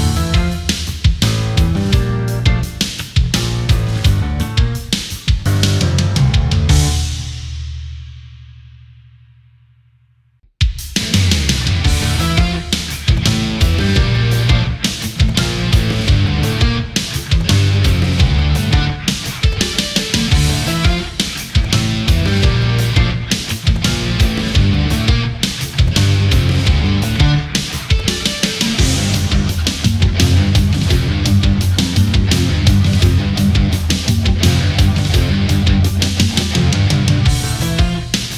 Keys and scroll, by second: 13.5 ctrl+z, 14.7 Left, 14.9 Up, 15.1 Down, 24.6 space, 27.7 space.